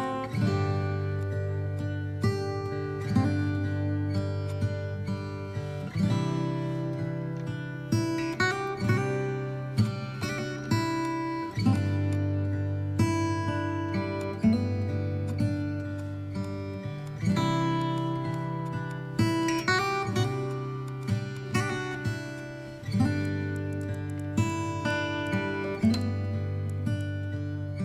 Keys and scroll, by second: 6.0 Down, 25.5 KP_3.